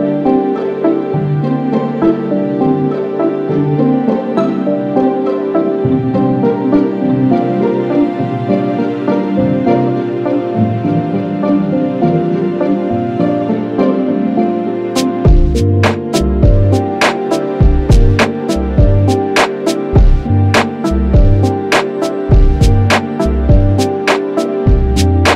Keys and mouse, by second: 0.4 alt+click, 4.2 alt+click, 7.1 ctrl+z, 7.9 ctrl+z, 12.5 alt+click, 16.6 Menu, 19.1 ctrl+=, 19.5 ctrl+=, 20.5 ctrl+=, 21.3 space.